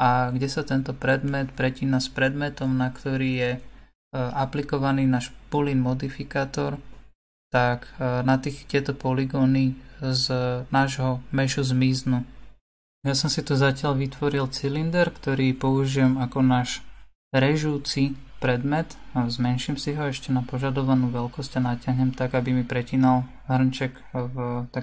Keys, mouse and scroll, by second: 0.6-3.8 drag, 6.9-7.6 scroll down 2, 7.6-10.8 middle drag, 10.8 r, 16.6-18.5 middle drag, 18.5 s, 23.9 click, 24.6-24.8 middle drag.